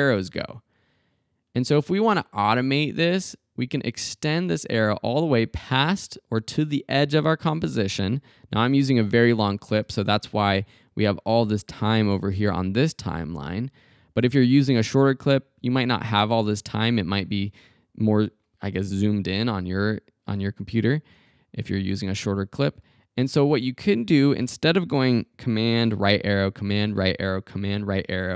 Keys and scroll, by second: 25.9 super+Right.